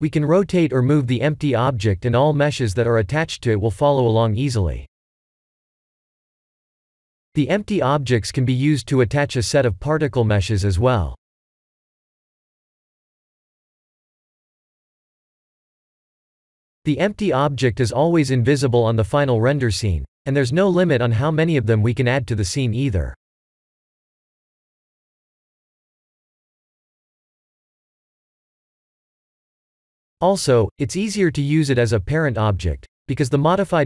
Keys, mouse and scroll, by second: 4.1-8.3 drag, 9.2-15.1 drag, 15.7 ctrl+z, 18.7 drag, 20.1 click, 20.7 drag, 21.0 click, 23.0 click, 24.2 click, 25.5-29.1 drag, 29.8 ctrl+z, 30.8-33.8 drag.